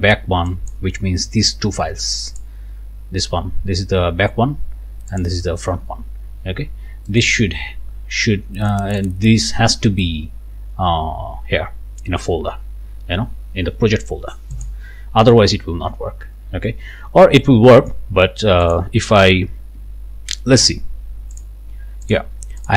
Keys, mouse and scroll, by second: 0.5 click, 2.4 click, 5.1 click, 7.1 click, 8.7 click, 14.5 click, 18.6 click, 21.4 click, 22.1 click, 22.6 click.